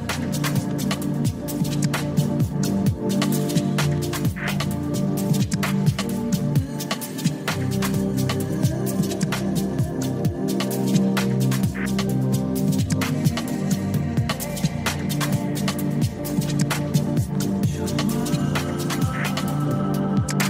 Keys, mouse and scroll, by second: 0.3 ctrl+z, 2.1 click, 4.6 click, 5.6 g, 10.8 click, 11.3 ctrl+z, 12.9 e, 15.3 click, 16.2 click, 17.0 click, 19.3 g.